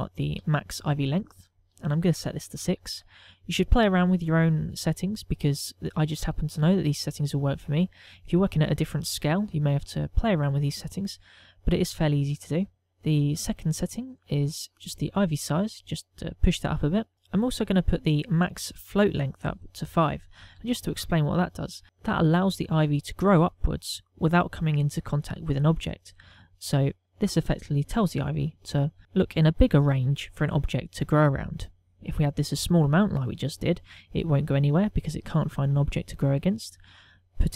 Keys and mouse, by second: 2.2 ctrl+click, 14.9 click, 15.3 click, 15.6 click, 15.8 click, 16.4 click, 16.9 click, 18.5 click.